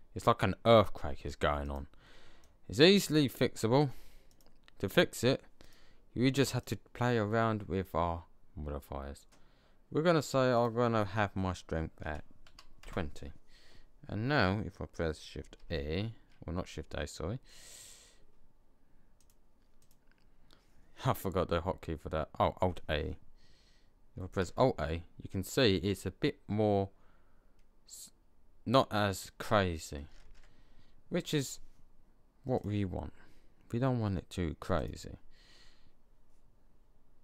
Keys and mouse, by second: 15.5 shift+a, 19.7 middle click, 24.2 alt+a, 30.1 alt+a, 32.8 click.